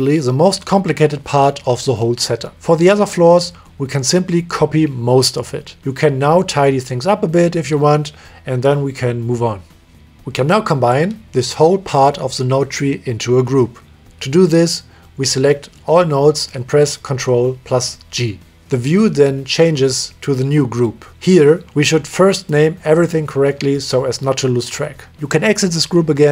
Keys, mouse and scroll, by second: 1.1 middle click, 2.8 click, 3.4 middle click, 3.7 click, 4.1 click, 4.5 click, 4.9 click, 5.3 click, 5.8 click, 6.3 click, 7.2 click, 7.3 middle click, 7.5 click, 8.0 click, 9.1 shift+right click, 9.5 middle click, 11.0 click, 11.1 click, 11.7 drag, 11.9 click, 12.3 middle click, 13.1-14.4 drag, 17.6 ctrl+g, 21.6 middle click, 23.4 click, 23.9 click, 25.6 click.